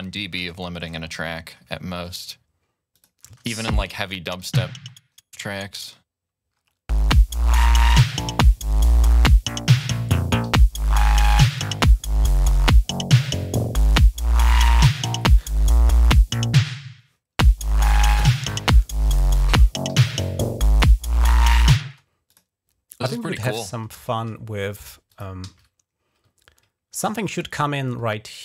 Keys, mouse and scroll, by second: 0.3 shift+right click, 0.9 ctrl+scroll up 4, 1.2-1.6 ctrl+scroll down 2, 2.8 click, 3.1 space, 3.4 ctrl+scroll up 1, 4.3 ctrl+scroll down 1, 4.3 typing, 4.7 ctrl+scroll up 1, 5.3-5.8 scroll down 1, 6.4 scroll up 1, 7.4-7.9 ctrl+scroll down 2, 7.9-8.7 typing, 8.6-9.4 ctrl+scroll down 2, 9.5 ctrl+scroll up 1, 10.3 typing, 10.8-11.1 scroll down 1, 11.6-12.0 scroll down 1, 12.1 scroll up 1, 12.9 scroll up 1, 13.3-13.7 scroll down 1, 13.9 scroll up 1, 14.7 scroll up 1, 18.3 ctrl+scroll down 2, 18.6 ctrl+scroll up 2, 19.7 g, 21.8 space, 22.1 click, 24.9 click, 25.3 ctrl+s, 26.2 scroll down 2, 27.1 scroll up 2.